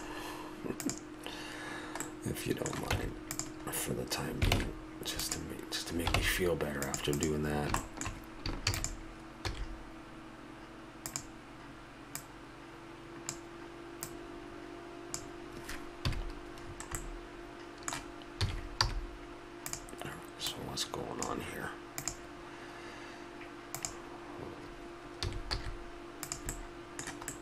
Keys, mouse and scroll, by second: 0.9-2.0 right drag, 2.0-3.7 middle drag, 2.9 Tab, 4.6 ctrl+Tab, 6.2 ctrl+Tab, 7.1 right click, 8.7 shift+d, 9.5 s, 13.0-15.8 drag, 16.0 KP_Decimal, 16.7 middle click, 18.4 s, 20.4-22.1 drag, 25.2 s, 26.5 click.